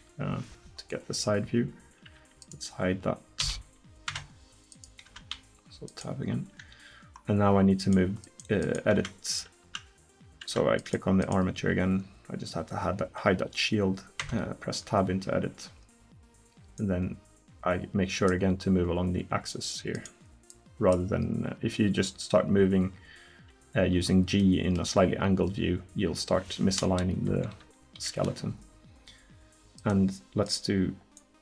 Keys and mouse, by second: 2.2 Tab, 3.4 h, 4.1 Tab, 5.1 Tab, 9.0 Tab, 9.7 Tab, 10.5 Tab, 14.2 Tab, 24.5 click, 27.3 KP_1, 28.0 KP_3.